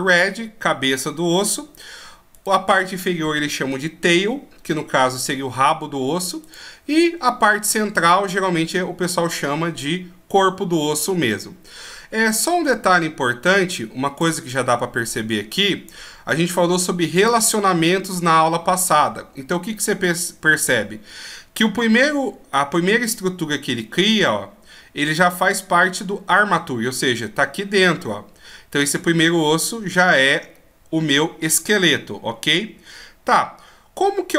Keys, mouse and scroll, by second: 2.2 right click, 6.3 right click, 13.5 click, 15.0 click.